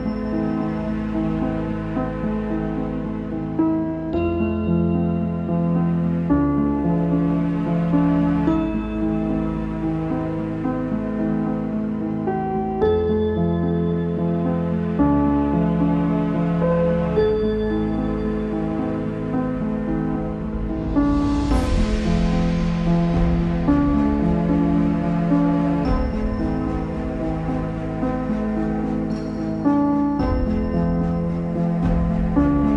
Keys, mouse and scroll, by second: 0.3 click, 1.5 right click, 1.8 Tab, 2.3 z, 2.6-4.4 middle drag, 4.4 click, 5.6 s, 9.0 click, 9.2 middle click, 9.6 ctrl+s, 10.4 click, 11.7 click, 12.0 scroll down 4, 13.3 shift+a, 13.9-14.3 scroll down 4, 14.3 s, 15.1-15.6 scroll up 2, 15.6 shift+click, 17.6 ctrl+c, 18.1 click, 18.3 s, 19.8-20.2 scroll up 3, 20.2 s, 21.7 Tab, 22.3 click, 22.5 z, 23.3 click, 23.9 click, 24.9 Tab, 25.7 click, 27.2 s, 29.6 scroll up 1, 30.6 Tab, 31.1 click, 31.6 click, 32.1 2.